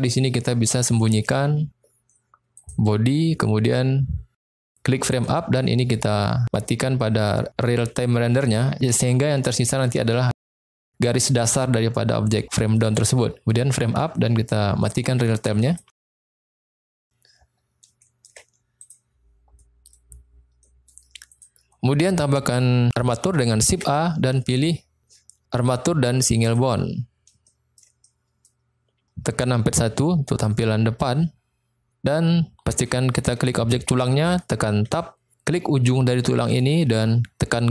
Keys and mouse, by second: 2.5 click, 5.0 click, 7.8-8.7 drag, 12.8 click, 14.8-15.7 drag, 16.0-16.6 middle drag, 18.0 shift+middle drag, 18.6 click, 19.5 middle click, 20.5 middle click, 21.3 click, 23.7 shift+a, 27.4-27.8 shift+middle drag, 28.0-28.3 middle drag, 29.9 KP_1, 33.9 click, 34.9 Tab, 36.5 click, 37.6 g.